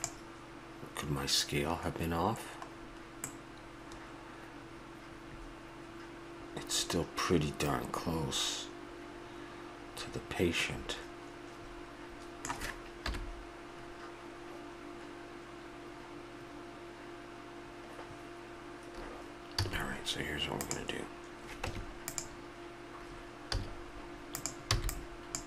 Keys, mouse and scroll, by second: 2.8-5.2 middle drag, 13.0 KP_1, 19.6 a, 20.6-22.6 drag, 21.6 Tab, 23.6 z, 24.8 b.